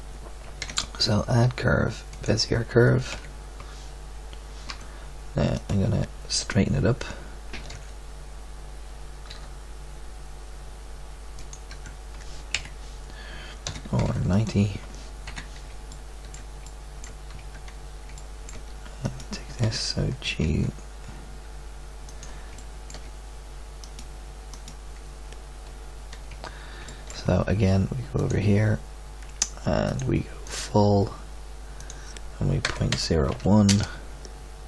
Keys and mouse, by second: 0.6 shift+a, 3.1 z, 4.6 Tab, 7.7 alt+r, 9.3 r, 11.6 Tab, 12.5 KP_1, 14.3 r, 15.2 KP_3, 17.3 Tab, 20.2 g, 22.5-26.2 drag, 26.2 Tab, 28.1-29.4 drag.